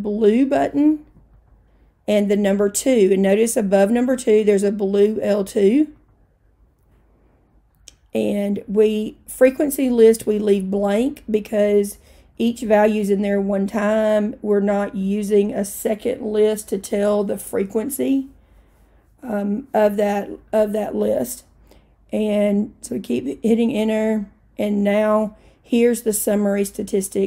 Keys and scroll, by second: 6.1 2, 9.6 Return, 22.4 Return, 23.2 Return.